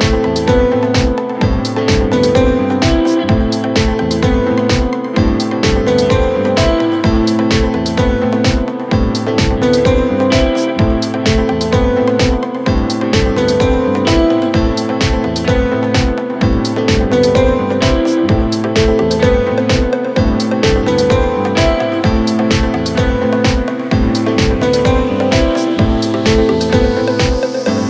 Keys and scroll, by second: 0.2 ctrl+z, 17.1 w.